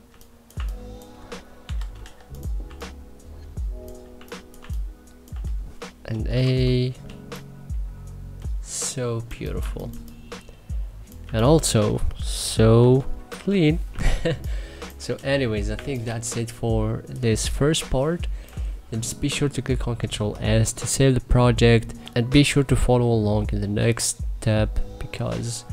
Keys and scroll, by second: 1.3 c, 1.6 e, 2.3 3, 3.7 1, 4.2 3, 5.7-6.7 typing, 9.2 1, 9.5 3, 10.8 2, 12.4 n, 13.0 b, 13.5 3, 15.3 1, 16.8 3, 19.6 ctrl+s, 25.6 3.